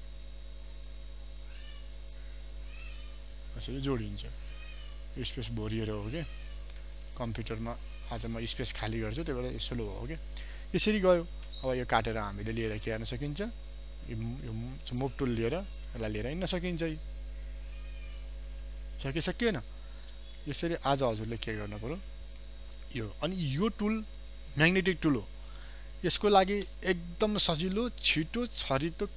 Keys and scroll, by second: 3.2 ctrl+p, 8.9 alt+space, 20.4 alt+space, 21.0 ctrl+alt+z, 22.0 ctrl+d.